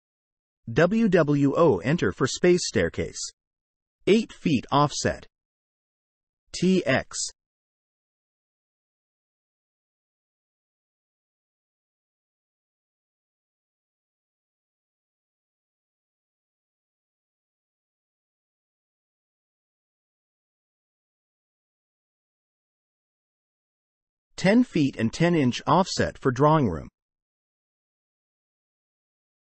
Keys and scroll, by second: 0.0 8, 1.1 BackSpace, 1.7 ', 2.0 Return, 5.4 space, 6.5 space, 8.9 Escape.